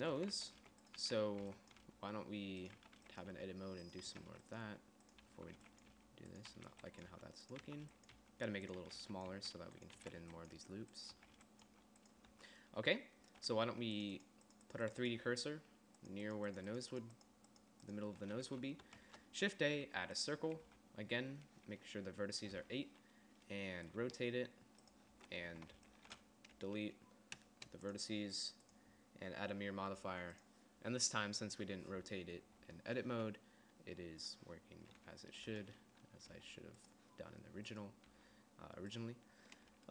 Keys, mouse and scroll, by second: 0.6-2.4 typing, 1.3 click, 3.5-12.2 typing, 12.8 Tab, 19.0 a, 19.5 shift+a, 21.2 t, 23.1 t, 24.5 r, 25.7 Tab, 26.0 a, 26.6 b, 27.9 Delete, 36.8 g, 38.6 g.